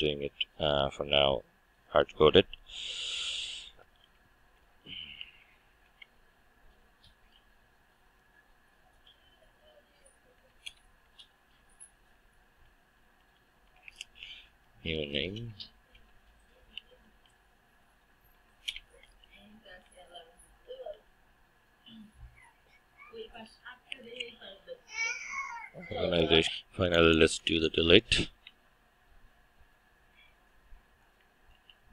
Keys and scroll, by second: 5.8 Return, 10.6 Return, 18.7 Return, 31.5 ctrl+d.